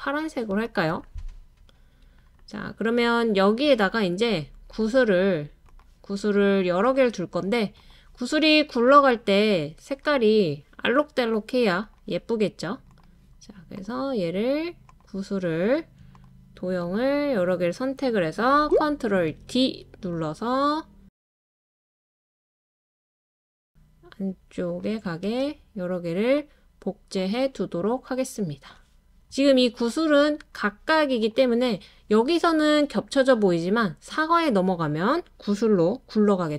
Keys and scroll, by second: 1.5 typing, 19.3 super+d, 22.0 super+d, 23.1 super+d, 24.7 super+d.